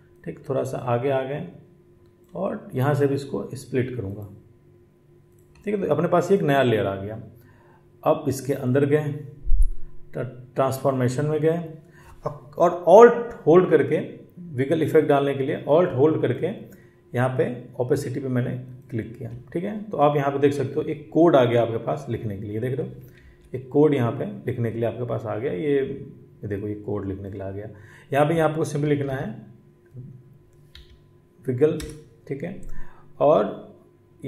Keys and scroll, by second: 23.0 ctrl+1, 23.1 ctrl+1.